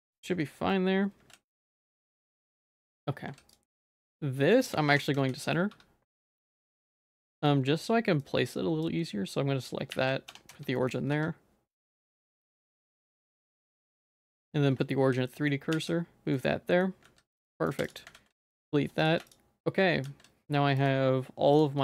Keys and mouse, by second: 0.1 middle click, 0.4 shift+middle click, 1.3 ctrl+s, 1.6 shift+middle click, 2.0 click, 2.2 g, 3.3 ctrl+s, 3.8 middle click, 4.1 shift+middle click, 4.5 middle click, 4.9 Tab, 5.1 z, 5.4 middle click, 5.7 1, 6.7 shift+middle click, 7.4 shift+middle click, 8.3 click, 9.3 shift+click, 9.9 shift+s, 10.3 Tab, 10.5 z, 10.8 middle click, 11.1 q, 13.6 q, 14.3 shift+click, 14.8 shift+s, 15.3 shift+click, 15.3 shift+middle click, 15.7 shift+s, 16.3 middle click, 17.1 ctrl+s, 17.8 x, 18.1 ctrl+s, 19.0 click, 20.1 ctrl+s, 20.8 shift+click.